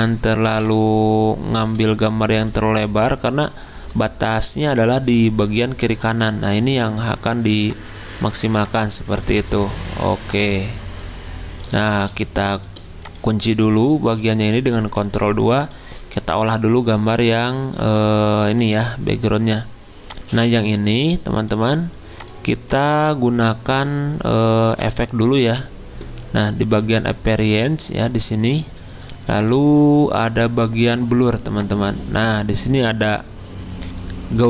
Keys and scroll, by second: 15.0 ctrl+2.